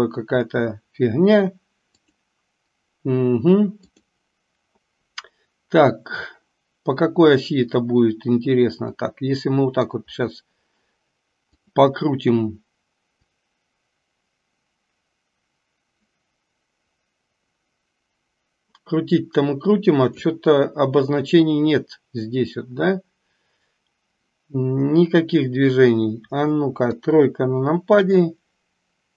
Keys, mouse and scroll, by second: 3.9 click, 9.0 scroll up 1, 9.2-10.0 middle drag, 11.5 click, 13.4-20.4 drag, 26.9 KP_3.